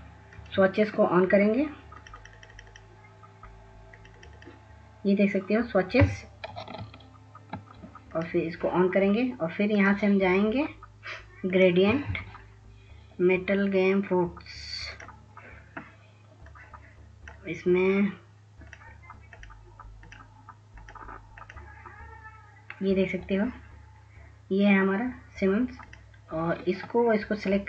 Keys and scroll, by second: 7.3 ctrl+s, 7.8 ctrl+s.